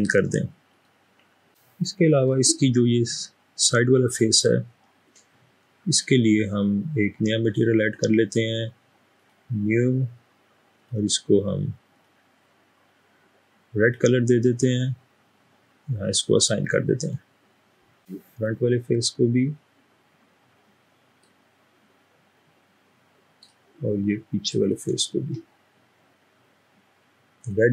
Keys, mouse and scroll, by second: 1.7 middle click, 18.3 click, 18.3 middle click, 21.6-23.4 middle drag.